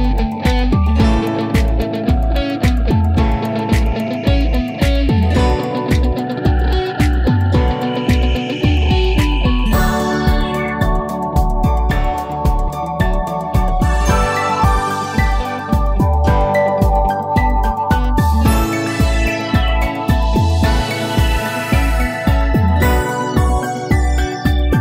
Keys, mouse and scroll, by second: 1.9-5.0 scroll up 1, 8.1 click, 13.2 alt+z, 17.5 click, 19.1 shift+click, 20.2-21.1 typing, 21.1 click, 22.5 alt+z, 23.3 click.